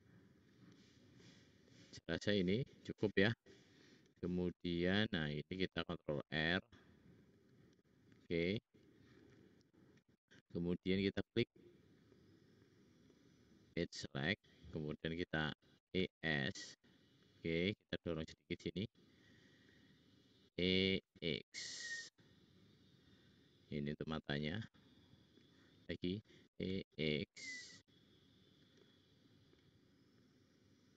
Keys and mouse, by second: 0.6 middle click, 5.7 ctrl+r, 12.2 middle click, 13.6 middle click, 14.3 middle click, 14.5 middle click, 15.7 e, 18.5 click, 20.4 e, 23.7 click, 26.4 e.